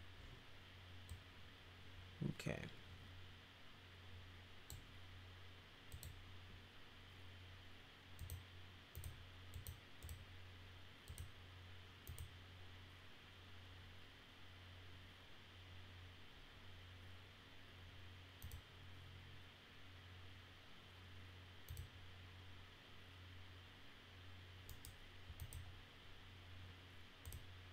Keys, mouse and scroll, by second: 1.1-4.7 drag, 5.9 click, 8.2 click, 8.9 click, 9.5 click, 10.0 click, 11.0 click, 12.1 click, 18.4 click, 21.7 click, 25.4 click, 27.2 click.